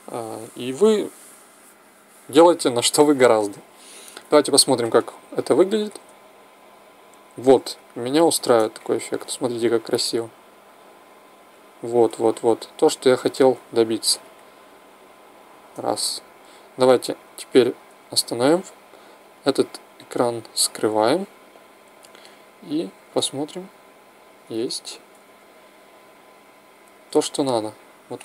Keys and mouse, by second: 5.7 alt+a, 9.9 click, 14.1 click, 17.9 Escape, 19.2 click, 22.9 alt+a, 24.4 Escape, 25.1 alt+a, 26.7 Escape, 27.2 alt+a.